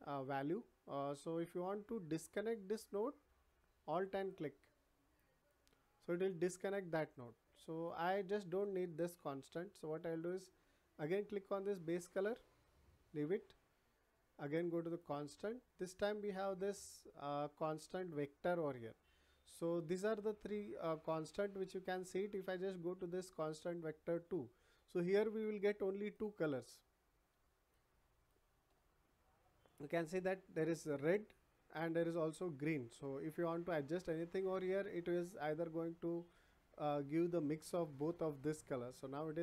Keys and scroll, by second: 9.1 Delete.